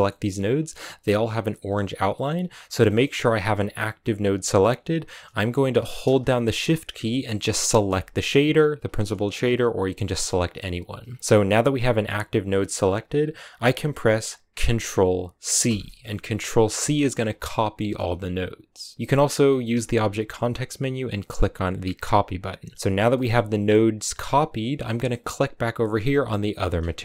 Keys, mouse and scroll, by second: 0.1-2.3 scroll up 4, 2.3-2.7 scroll down 3, 2.7-6.4 middle drag, 7.7-9.1 shift+right drag, 9.1-9.9 scroll down 5, 9.9 middle click, 10.9-11.8 scroll up 5, 15.5 ctrl+c, 16.7 ctrl+c, 17.0-17.6 scroll down 6, 17.6-18.9 middle drag, 18.9 w, 19.6 w, 22.8 scroll down 2, 23.0-25.4 middle drag, 25.4-27.0 right drag.